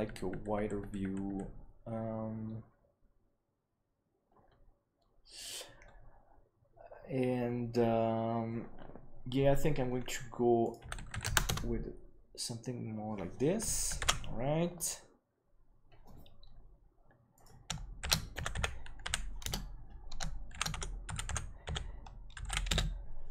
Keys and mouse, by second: 10.5-13.0 drag, 14.2 ctrl+s.